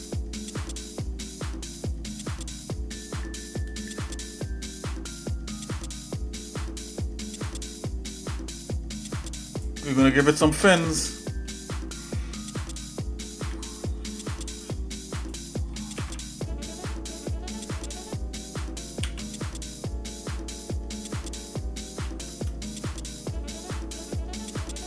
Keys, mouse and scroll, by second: 10.1 shift+middle click, 11.2 shift+middle click, 13.5 e, 16.0 alt+s.